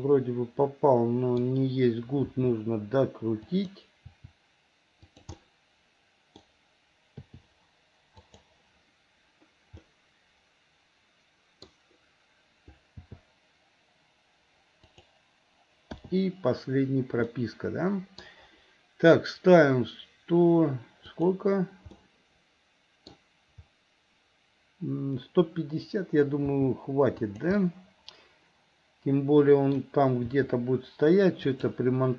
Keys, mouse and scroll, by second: 2.3 r, 4.0 r, 5.4-6.4 middle drag, 7.3 i, 8.3 click, 9.8-11.7 middle drag, 13.0 g, 16.0 i, 17.3 middle click, 21.2 click, 22.0-23.1 middle drag, 26.4 g, 27.6-29.8 middle drag, 30.3 r.